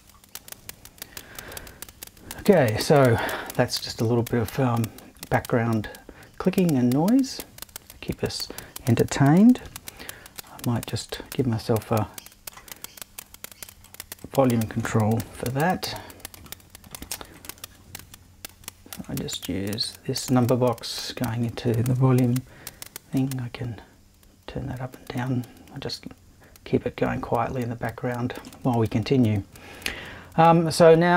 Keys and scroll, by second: 9.6 super+3, 15.2 BackSpace, 18.0 super+3.